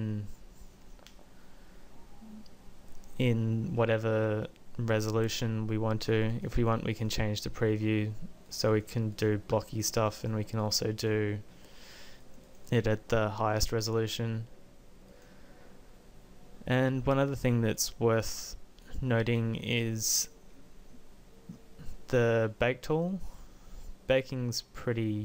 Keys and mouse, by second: 3.6-5.4 middle drag, 5.4-6.8 drag, 15.7-19.7 drag, 23.0-25.2 drag.